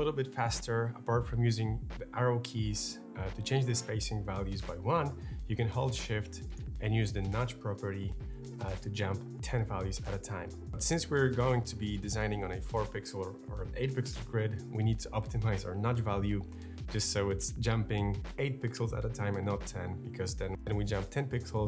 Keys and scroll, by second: 2.6 Up, 2.9 Down, 3.7 Up, 3.9 Down, 9.2 shift+Up, 10.5 shift+Down, 20.3 shift+Up, 21.3 alt+Down.